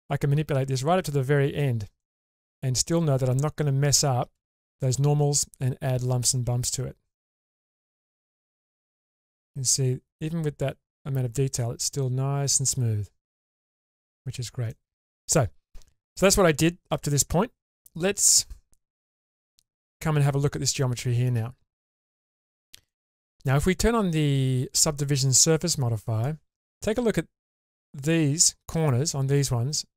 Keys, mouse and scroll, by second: 1.6-2.0 scroll up 2, 2.0-4.0 middle drag, 4.4 shift+space, 4.9-6.3 middle drag, 6.7 shift+space, 7.4 shift+space, 8.3 Tab, 9.0-13.7 middle drag, 13.9-15.0 scroll down 5, 14.7 middle click, 17.1-17.9 middle drag, 19.1 Tab, 20.1 scroll up 1, 20.4-20.9 middle drag, 21.0 shift+middle drag, 22.0-22.3 shift+middle drag, 22.8-23.4 shift+middle drag, 25.8 click.